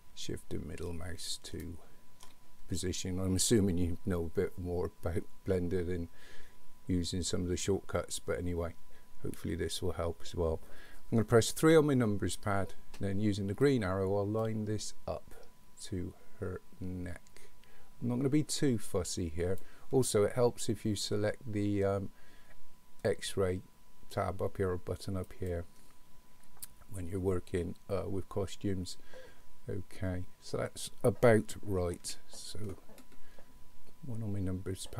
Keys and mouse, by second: 11.6 KP_3, 13.6-19.7 drag, 25.4 click, 32.0 KP_1.